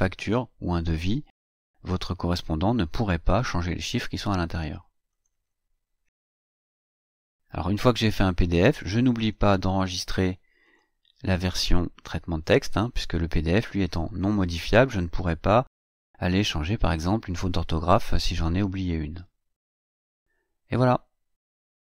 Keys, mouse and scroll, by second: 4.8 click, 10.4 click, 19.4-19.7 scroll down 1, 19.9-20.6 scroll down 2, 20.6-20.9 scroll up 2, 20.9 scroll down 2, 21.1-21.7 scroll up 2.